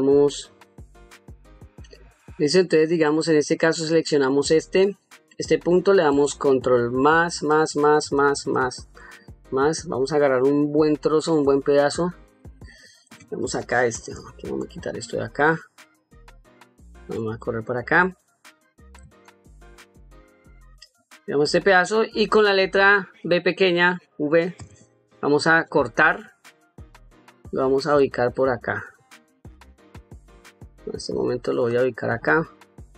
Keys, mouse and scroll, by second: 1.5 click, 3.4 click, 6.8 ctrl+KP_Add, 7.2 ctrl+KP_Add, 14.4 shift+click, 17.2 middle click, 19.1 shift+click, 21.7 middle click, 24.4 v, 27.9 middle click, 28.8 middle click, 31.5 click, 32.1 middle click.